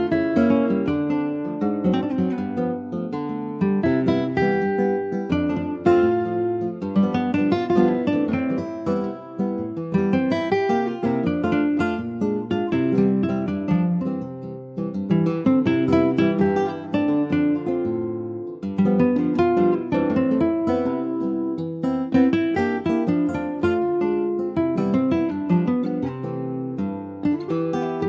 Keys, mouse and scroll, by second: 0.5-3.1 right drag, 3.1 click, 4.5 click, 4.9 click, 5.4 click, 5.8 middle click, 6.2 s, 10.7 alt+middle click, 11.4 ctrl+s, 11.6 scroll up 2, 11.9 shift+middle click, 12.4 s, 14.2 scroll down 3, 14.5 click, 14.9 middle click, 15.1-15.5 scroll up 3, 15.5 ctrl+s, 15.6 click, 16.3 /, 17.0 middle click, 17.3 Tab, 17.7 alt+z, 18.0 alt+middle click, 19.3 click, 20.8-21.6 scroll down 1, 21.6 3, 22.0-24.7 drag, 24.9 click, 27.7 alt+click.